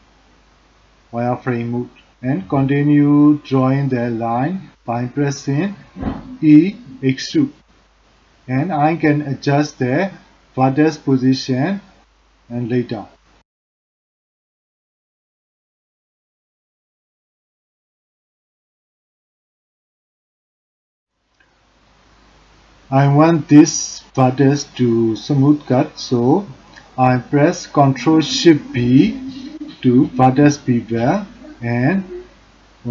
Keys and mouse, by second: 0.3 e, 6.7 click, 7.0 g, 10.3 g, 16.7 g, 18.4 click, 24.2 ctrl+shift+b.